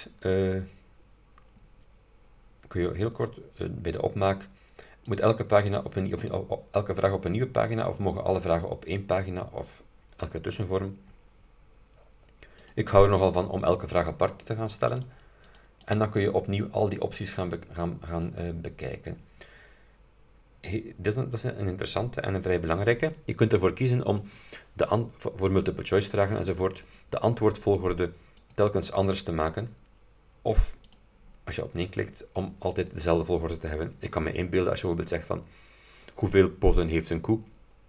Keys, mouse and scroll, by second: 5.1 click, 12.7 click, 15.1 click, 15.6 click, 15.9 click, 18.2-18.5 scroll down 2, 18.9-19.4 scroll down 2, 28.5 click, 31.0 click.